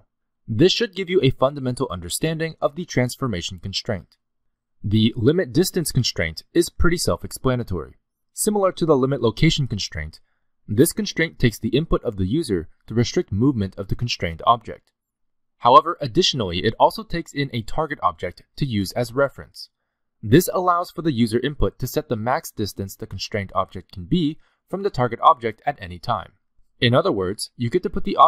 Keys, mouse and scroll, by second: 0.0 click, 0.5-0.9 scroll down 3, 0.7 middle click, 1.0 g, 3.2 g, 4.1 g, 6.1 click, 7.4 click, 7.8 click, 10.5 click, 15.3 click, 18.2 middle click, 19.1-19.6 scroll up 3, 19.7 shift+middle click, 20.2 middle click, 23.2 g, 27.7-28.2 scroll down 4, 27.9 middle click.